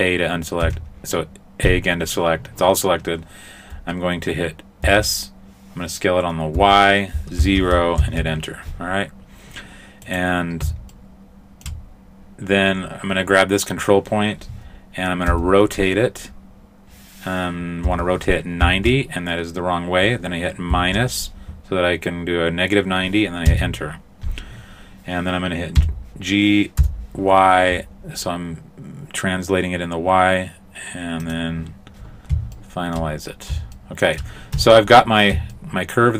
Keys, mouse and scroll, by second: 0.6 a, 4.9 s, 10.1 right click, 11.0 shift+middle click, 15.3 r, 25.8 g, 32.0-32.6 scroll down 1, 32.6 shift+middle click, 33.8 shift+middle click, 34.6 Tab, 35.0-35.5 scroll down 2, 35.6 shift+middle click.